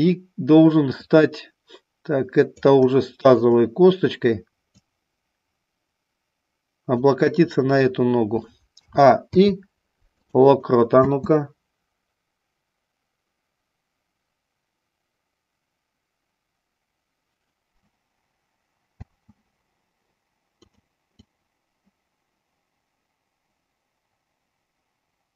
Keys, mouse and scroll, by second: 0.9-2.6 drag, 3.3 shift+click, 4.8-6.9 drag, 8.7 a, 9.2 i, 10.9 space, 18.9 space, 20.6 click, 21.2-25.3 drag.